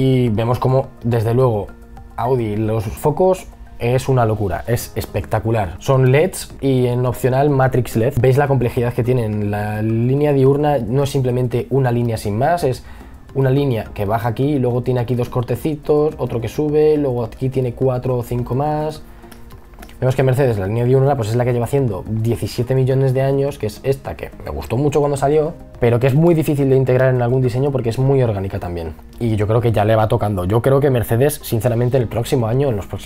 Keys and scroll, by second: 5.5 b.